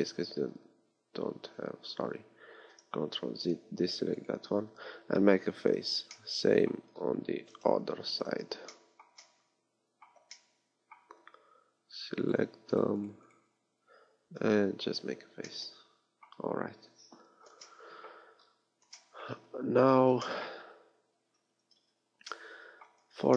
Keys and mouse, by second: 3.2 ctrl+z, 5.7 f, 7.8 ctrl+KP_3, 12.2-14.3 middle drag, 14.3 f, 16.9 KP_3, 21.2 a, 21.8 Tab, 23.0 z.